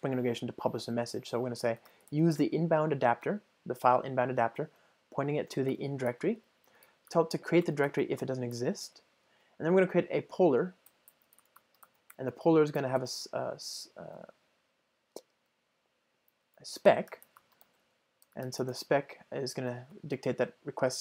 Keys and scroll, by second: 3.3 Return, 7.7 Return, 12.8 Return.